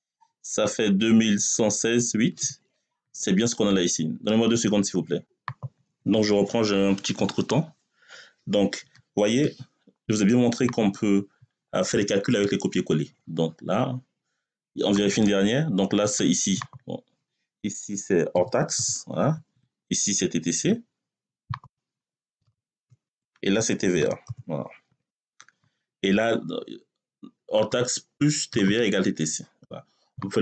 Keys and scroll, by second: 18.2 h, 19.1 Tab, 22.1 t, 22.6 c, 22.9 Tab, 23.8 t, 24.1 v, 24.7 a, 24.9 Return.